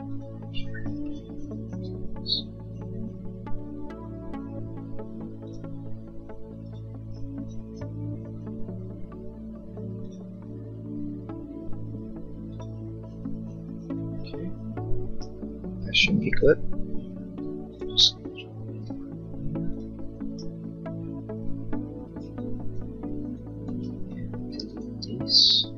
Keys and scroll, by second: 16.3 l, 22.0 e.